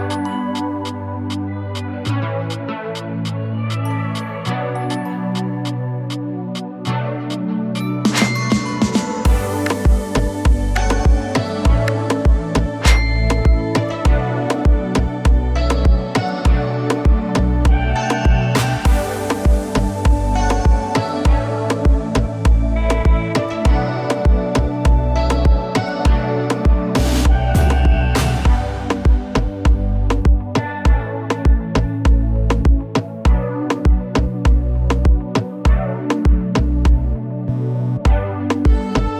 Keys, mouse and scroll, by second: 4.8-6.4 typing, 7.8-17.9 drag, 11.3-11.6 drag, 12.8-13.1 drag, 15.2-15.8 drag, 16.8-17.4 drag, 22.8 click, 24.2-25.0 typing, 26.1-26.8 drag, 38.9 click.